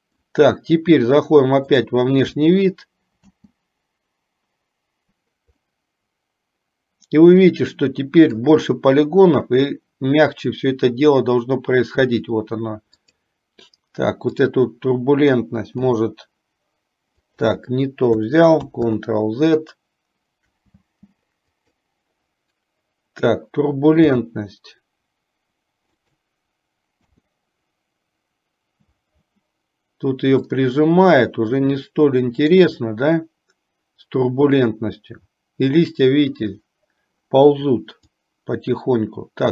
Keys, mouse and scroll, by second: 0.0 middle click, 2.2 click, 3.7 space, 6.3-9.4 middle drag, 13.5 click, 16.5 g, 19.2 ctrl+z, 21.0 space, 21.9 click, 27.5 space, 31.2-33.5 middle drag, 38.7-39.5 drag.